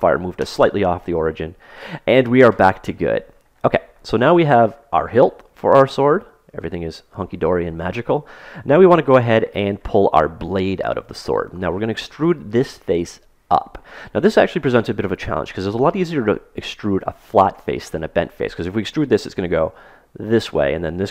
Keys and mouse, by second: 4.5-8.1 middle drag.